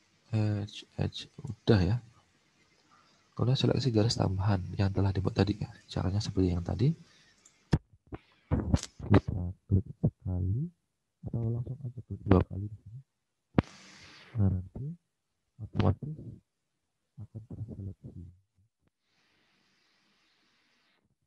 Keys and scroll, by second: 2.1 alt+Tab, 5.7 alt+Tab, 19.2 alt+Tab.